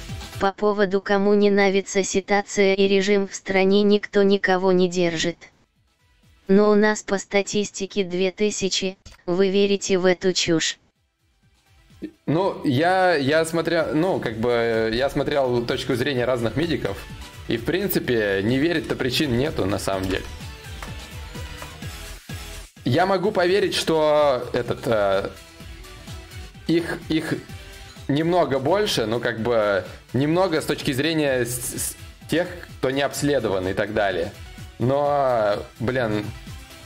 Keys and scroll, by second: 0.4 ctrl+v, 1.8 ctrl+t, 7.5 Return, 8.5 ctrl+d, 18.1 ctrl+z, 18.9 ctrl+z, 19.7 ctrl+shift+z, 19.7 y.